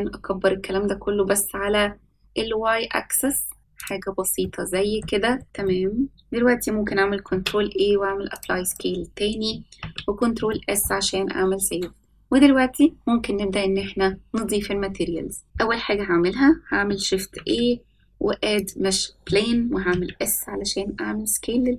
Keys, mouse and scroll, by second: 4.4-5.0 middle drag, 5.3 middle click, 5.6 shift+middle click, 7.2 ctrl+a, 8.6 click, 9.8 ctrl+s, 10.5-10.8 shift+middle drag, 17.2 shift+a, 19.8 s.